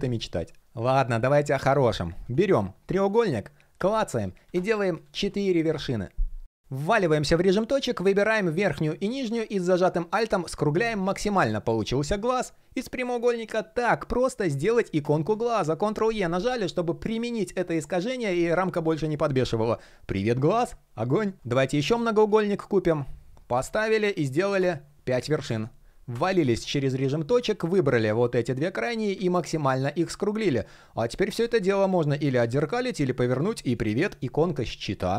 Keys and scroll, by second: 0.6 super+\, 15.4 super+e.